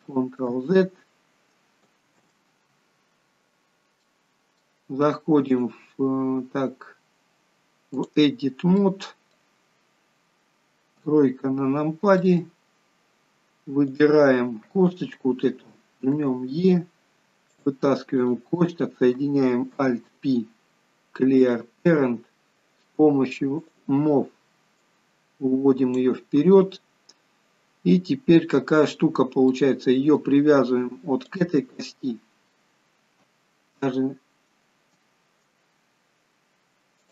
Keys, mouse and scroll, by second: 4.0 ctrl+z, 4.1 middle click, 5.6 click, 8.9 middle click, 11.1 KP_3, 12.2 scroll up 1, 12.3 middle click, 13.0-13.3 scroll up 2, 14.0 click, 16.3 e, 18.3 click, 19.8 alt+p, 22.4 scroll down 3, 23.7 click, 24.9 click, 26.5-26.8 scroll up 3, 27.2 scroll down 2, 29.7 middle click, 31.4 shift+click.